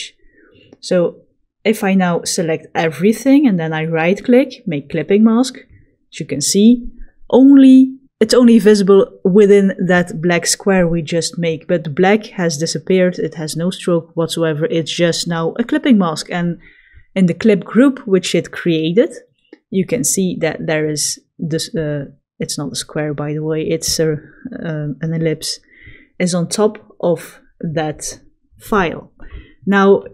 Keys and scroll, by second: 1.7 v.